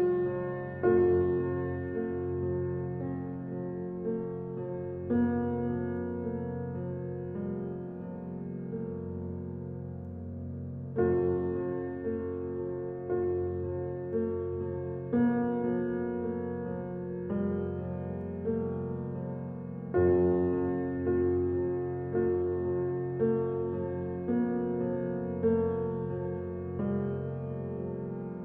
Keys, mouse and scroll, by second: 1.8 alt+e, 7.0 Tab, 7.6 scroll down 1, 8.2-10.9 middle drag, 12.5 g, 19.4-20.2 middle drag, 20.2-20.7 scroll down 3, 20.7-22.4 middle drag, 22.4-23.0 scroll up 1, 23.0-24.9 shift+middle drag, 24.9 scroll up 1, 25.6 click, 27.9 shift+d.